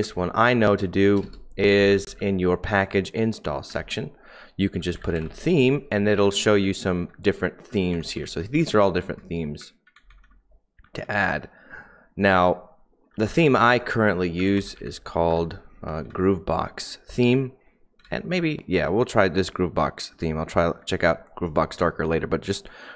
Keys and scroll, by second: 0.0-5.3 typing, 6.1 Down, 6.3 Down, 6.7 Down, 7.0 Down, 7.6 Up, 7.9 Down, 8.1 Down, 8.3 Down, 8.5 Down, 8.7-9.5 Down, 9.5 Up, 9.9 Down, 11.0 Down, 11.3 Down, 11.4 Down, 11.6 Down, 11.9 Down, 12.1 Down, 13.0-16.5 typing, 17.9-18.7 typing, 18.7 Up.